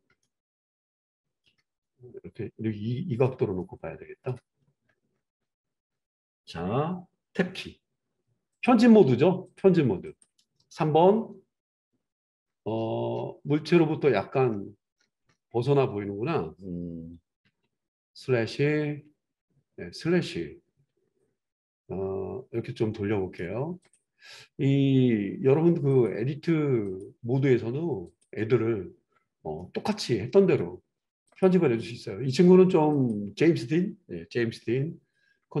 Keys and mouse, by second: 7.6 Tab, 8.5 click, 8.6 middle click, 9.5 click, 9.7 middle click, 10.1 click, 10.2-23.8 middle drag, 11.0 KP_3, 17.4 /, 18.9 /, 23.8-28.2 drag, 28.2-31.2 middle drag, 31.2 click, 31.4-32.9 middle drag, 32.9 click, 33.1-35.6 middle drag.